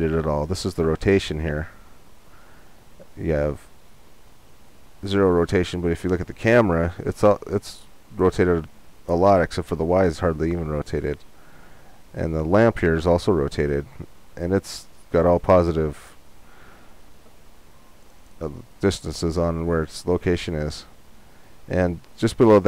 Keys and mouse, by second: 20.1-22.0 right drag.